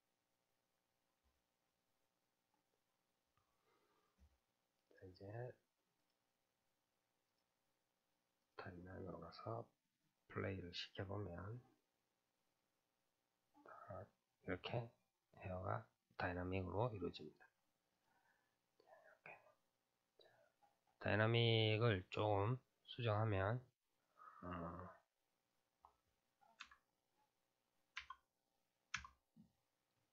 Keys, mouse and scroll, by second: 0.5-1.6 scroll up 5, 1.6-4.8 scroll up 16, 2.0-4.8 middle drag, 4.8-13.6 drag, 13.6-15.5 middle drag, 15.5-18.1 scroll up 5, 18.1 click, 18.5-19.4 middle drag, 19.4-21.2 scroll up 4, 21.2-21.6 scroll up 1, 21.6-24.4 scroll down 4, 24.4-24.8 drag, 24.8-25.5 scroll down 3, 25.5-28.7 drag.